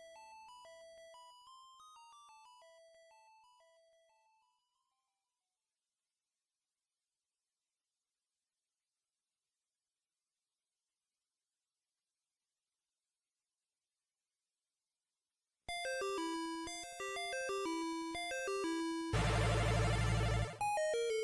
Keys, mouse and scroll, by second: 1.7 Tab, 3.9 KP_Divide, 4.9 scroll down 1, 5.7-6.4 scroll down 2, 12.3-12.8 scroll up 1, 12.8-13.4 scroll up 1, 13.4-14.8 scroll up 1, 20.9 right click.